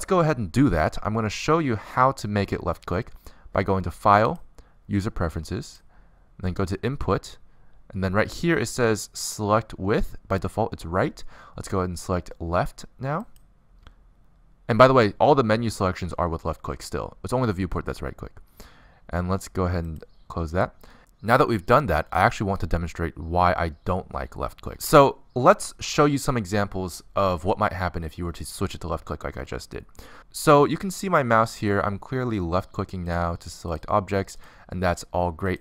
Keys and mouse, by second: 4.2-7.0 drag, 33.1-35.6 drag.